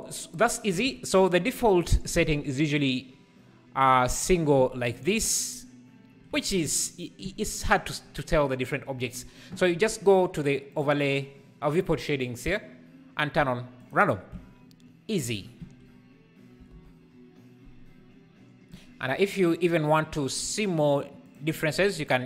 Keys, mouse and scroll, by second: 0.8 alt+a, 2.6-13.8 drag.